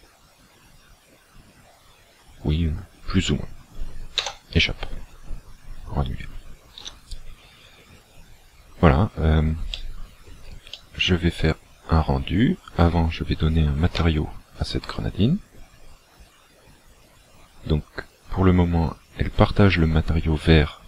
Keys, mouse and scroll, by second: 5.0-5.6 scroll down 9, 6.9 a, 7.4-7.8 scroll down 2, 9.8 shift+middle click, 10.7 middle click, 14.0 Tab.